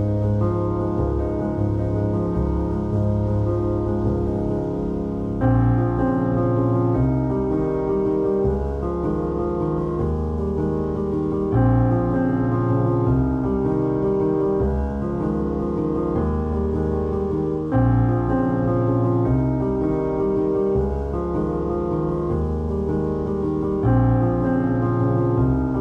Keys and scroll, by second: 2.4 Tab, 3.1 ctrl+r, 4.3 Tab, 4.9 ctrl+r, 5.5 3, 6.3 1, 6.9 3, 9.6 x, 11.0 alt+z, 11.6 3, 12.1 x, 14.3 z, 14.5 x, 15.7 1, 17.2-21.2 typing, 20.2 ctrl+x, 22.2 f, 24.0 f, 24.1 2, 24.9 ctrl+x, 25.4 ctrl+x.